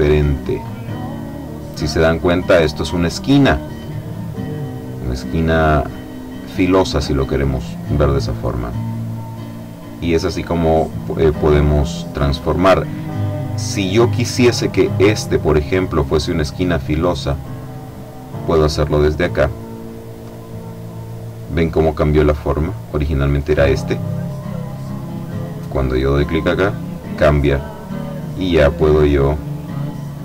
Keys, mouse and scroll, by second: 8.8-11.4 drag, 11.7 click, 15.0-17.8 drag, 20.1 click, 24.0 click, 26.4 click, 28.6-30.2 drag.